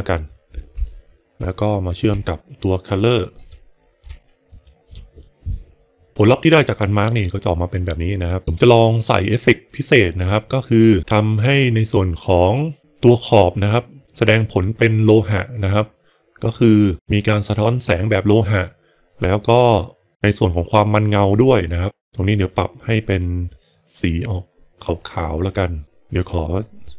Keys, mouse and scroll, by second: 0.9 middle click, 4.5 ctrl+shift+click, 22.3 click, 26.8 click.